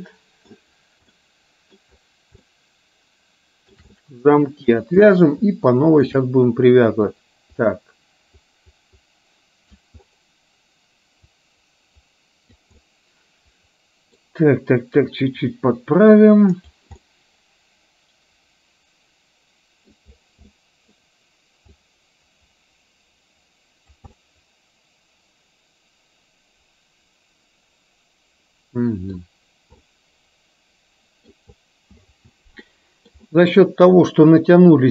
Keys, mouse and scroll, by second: 1.2-1.9 middle drag, 2.5-3.8 shift+middle drag, 3.9-4.8 middle drag, 5.0-6.2 shift+middle drag, 7.2-9.9 drag, 11.4-12.7 drag, 12.9-14.2 middle drag, 15.4-16.8 drag, 17.0-18.5 scroll up 1, 18.5-20.0 middle drag, 20.5 middle click, 21.1-21.7 scroll down 1, 21.9-24.0 drag, 24.3-29.3 middle drag, 29.9-31.5 middle drag, 32.8-33.2 scroll up 1, 34.5 click.